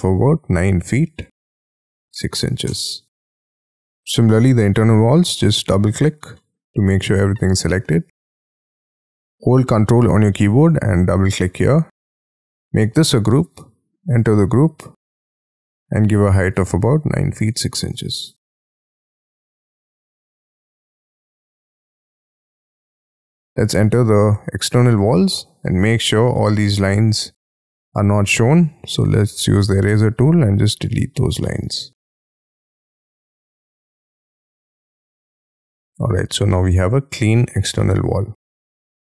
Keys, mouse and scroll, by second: 0.2-3.1 typing, 2.6 Return, 3.3 Escape, 3.7 scroll down 2, 3.9-4.5 scroll up 11, 5.0 double click, 5.2 double click, 5.7-6.1 scroll down 14, 6.3 middle click, 7.8-8.3 scroll up 11, 10.5 ctrl+click, 10.7 ctrl+click, 11.4-11.8 ctrl+scroll down 13, 12.2 middle click, 12.8 g, 13.1-14.1 scroll up 10, 14.3 double click, 15.4 p, 16.5-18.8 typing, 19.2 scroll down 8, 19.6-21.0 scroll up 16, 21.0 double click, 21.3-21.7 scroll down 6, 21.9 Escape, 22.3 middle click, 22.5 scroll down 1, 23.1 double click, 24.3 j, 24.6 j, 25.1 shift+middle click, 28.6 e, 31.4 shift+middle click, 32.8 middle click, 34.3 middle click, 35.1 middle click, 35.4 middle click, 35.8 middle click, 36.4 middle click, 37.3 middle click, 37.7 middle click, 38.0-38.4 scroll down 6, 38.6 shift+middle click, 38.9 shift+middle click.